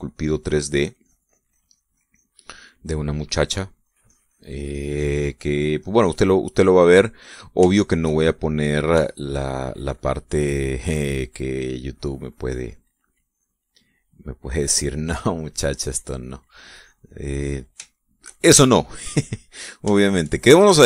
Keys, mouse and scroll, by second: 3.2 middle click, 4.4-7.0 drag, 8.3 shift+middle click, 9.1 middle click, 9.6 shift+middle click, 10.1 shift+middle click, 11.5-14.2 drag, 14.6 click, 15.9-18.0 drag, 18.0 middle click, 18.5 shift+middle click, 19.8 click, 20.6 shift+click.